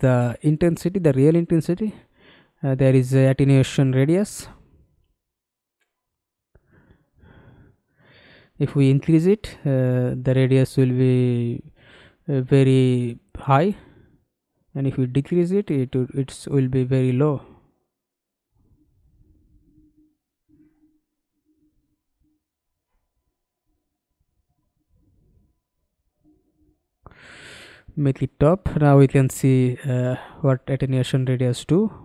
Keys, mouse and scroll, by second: 1.4-2.9 scroll down 7, 3.3 middle click, 4.3-4.7 scroll down 4, 4.8 middle click, 5.6 scroll up 1, 5.8-6.5 scroll down 4, 6.6 alt+click, 12.3 alt+middle click, 12.9 alt+right click, 13.5 alt+middle click, 14.4 alt+middle click, 14.9 alt+right click, 24.2-25.3 scroll down 2, 31.4-32.0 scroll down 1.